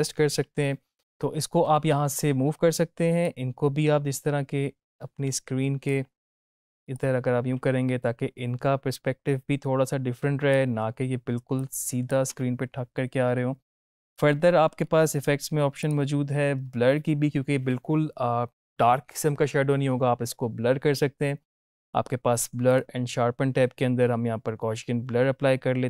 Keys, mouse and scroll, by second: 0.9 ctrl+z, 3.1-5.9 drag, 6.9-10.6 drag, 11.5-12.1 click, 12.2 space, 14.7-15.5 scroll up 1, 15.7 click, 22.6 click, 24.7 click.